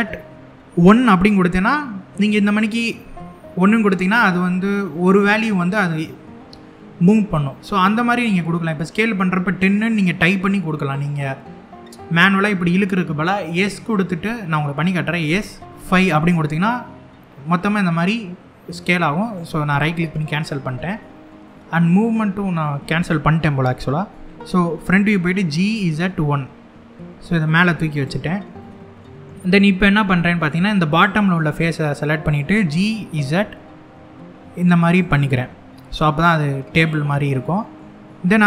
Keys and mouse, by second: 2.7 1, 14.9 s, 15.6 5, 18.9 right click, 21.1-22.2 middle drag, 24.2 KP_1, 24.8 g, 25.4 z, 25.7 1, 27.6 click, 28.2 middle click, 29.6 middle click, 30.7 click, 31.6 middle click, 32.2 g, 32.8 z, 34.6 click, 34.8-36.4 middle drag, 37.0 middle click.